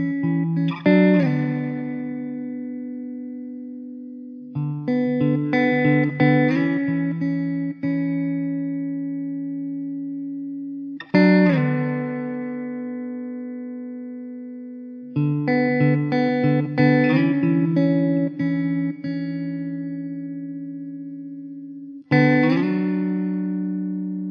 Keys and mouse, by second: 6.9 middle click, 8.1 alt+middle click, 9.9 middle click, 11.5 alt+middle click, 18.4 alt+middle click, 20.3 alt+q, 20.7 alt+middle click, 23.8 alt+w.